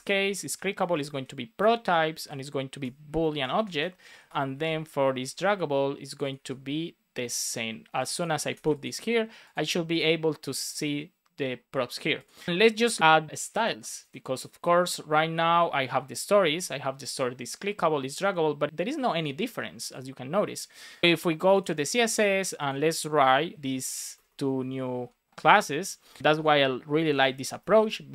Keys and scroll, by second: 0.1 shift+;, 0.4 space, 0.8 shift+p, 1.5 Return, 2.7 Return, 3.2 shift+super+Left, 3.5 super+c, 3.6 Right, 4.3 Return, 4.5 super+v, 6.3 super+c, 8.2 super+v, 8.5 super+s, 23.2 Return, 23.8 Down, 24.1 Return, 25.2 BackSpace, 27.4 space, 27.6 shift+[, 27.8 Return.